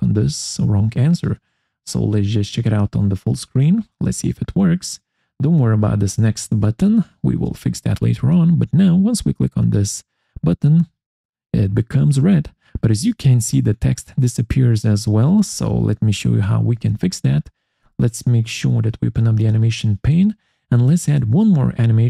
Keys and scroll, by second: 16.6 Escape.